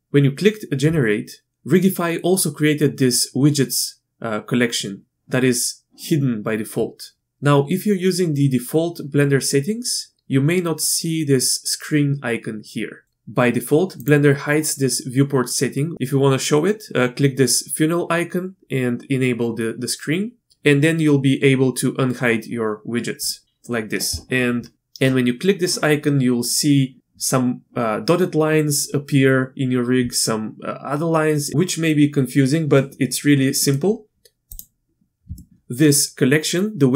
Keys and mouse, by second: 14.1-20.4 drag, 33.6 middle click, 34.5 click, 35.4 shift+click.